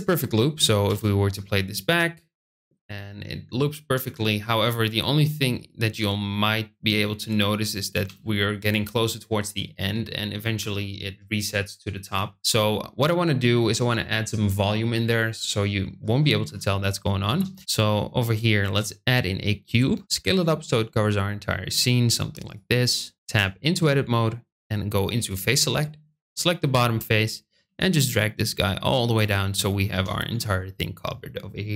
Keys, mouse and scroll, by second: 0.7 space, 9.1 space, 15.4 middle click, 18.5 shift+a, 20.0 s, 22.4 click, 23.0 middle click, 23.2 Tab, 25.2 click, 26.0 click, 27.3 g, 27.5 z, 29.0 click, 29.8 Tab.